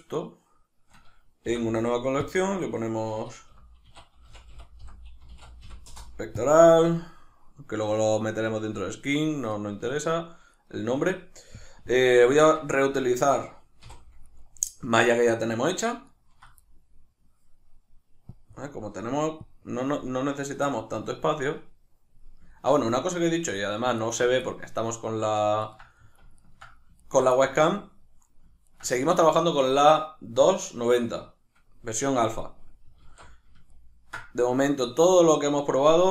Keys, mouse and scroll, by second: 0.2 shift+right click, 1.5 m, 7.5-8.8 middle drag, 8.8-10.5 drag, 10.5 right click, 12.4 Tab, 13.1-14.3 ctrl+middle drag, 13.9 3, 14.3 right click, 16.1 ctrl+right drag, 16.7-18.3 middle drag, 18.3-21.3 drag, 21.3-23.1 middle drag, 23.1 right click, 24.0 ctrl+right click, 24.4-25.6 middle drag, 25.6 ctrl+right click, 26.0-26.4 middle drag, 26.4 ctrl+right click, 27.0 right click, 27.4-28.6 middle drag, 28.6 ctrl+right click, 29.0-36.1 middle drag, 33.1 alt+q.